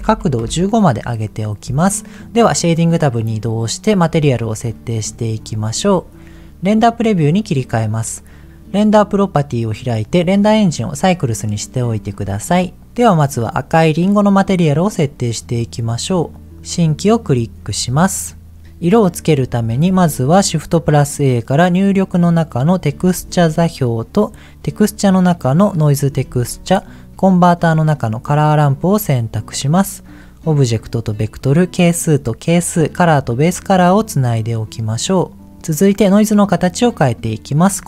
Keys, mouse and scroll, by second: 3.3 click, 4.1-4.6 scroll up 2, 4.7 shift+middle click, 5.1 middle click, 5.4-6.2 scroll up 5, 7.2 click, 8.9 click, 10.3 click, 11.8 scroll up 2, 12.2 shift+middle click, 12.5-12.9 shift+scroll up 3, 13.2 click, 16.5 click, 17.2-18.3 scroll down 4, 18.0 middle click, 18.6 click, 19.6 shift+a, 23.1 shift+a, 26.2 shift+a, 30.0 click, 31.3 click, 33.3-34.3 drag, 37.2 click.